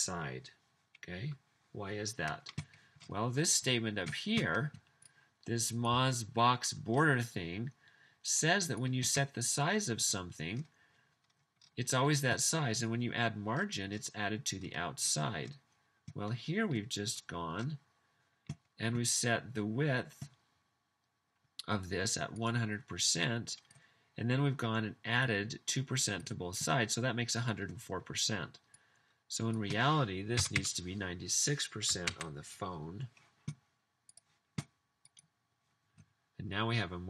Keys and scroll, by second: 30.2-31.0 typing, 32.1 super+s.